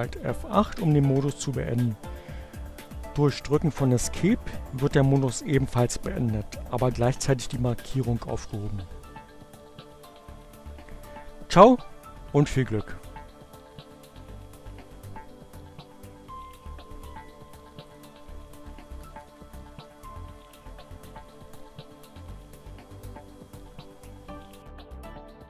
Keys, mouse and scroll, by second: 16.0 shift+F8, 17.1 click, 18.4 shift+Right, 21.3 shift+F8.